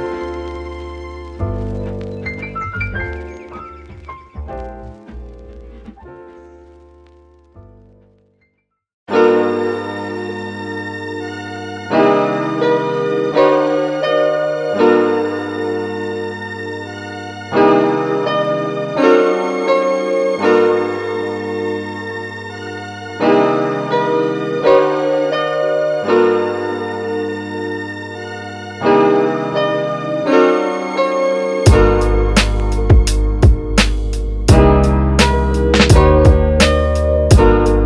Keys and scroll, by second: 2.9 super+s, 3.3 Right, 3.7 BackSpace, 4.0 7, 4.5 Return, 11.0 space.